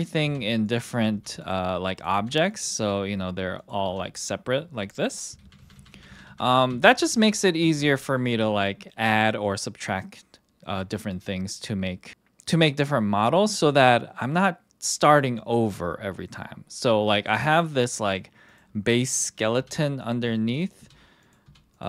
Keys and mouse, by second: 0.2 g, 0.6 click, 0.9 click, 1.1 g, 1.4 click, 1.9 click, 2.1 g, 3.5 click, 3.8 g, 5.4 ctrl+z, 5.6 ctrl+z, 5.7 ctrl+z, 5.9 ctrl+z, 6.1 ctrl+z, 6.3 ctrl+z, 6.7 ctrl+z, 7.1 click, 17.5 click, 19.5-21.8 typing, 20.5 click, 21.2 click.